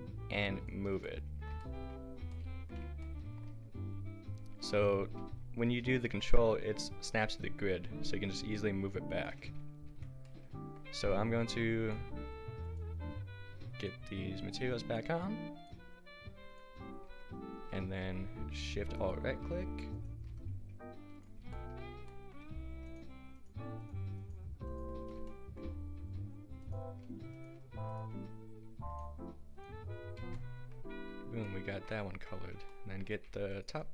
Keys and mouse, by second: 4.7 g, 9.9 Tab, 11.2 Tab, 14.9-17.1 drag, 17.1 Tab, 17.8 a, 19.0-21.2 drag, 21.5 middle click, 21.9 click, 22.9-25.1 middle drag, 22.9 a, 25.1-28.9 drag, 30.2 Tab, 30.2 click, 30.4-31.5 middle drag, 32.1 Tab, 33.1 a, 33.5-33.9 drag.